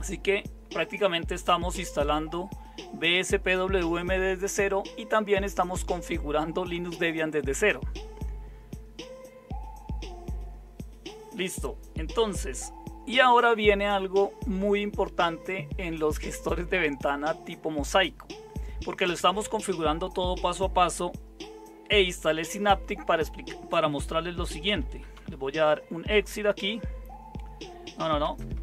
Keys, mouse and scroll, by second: 24.5-25.7 typing, 28.2-28.6 typing.